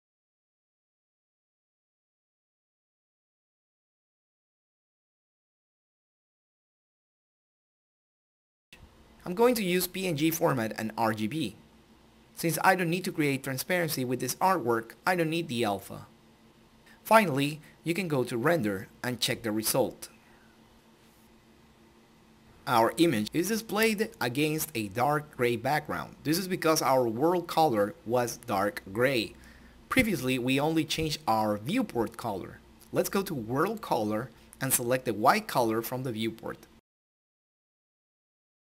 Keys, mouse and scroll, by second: 0.9 click, 0.9 typing, 1.5-7.0 drag, 11.6 click, 15.2-18.2 drag, 21.7 click, 23.0-23.5 scroll down 1, 25.1 scroll up 1, 27.0-28.6 middle drag, 30.4 click, 33.8 click.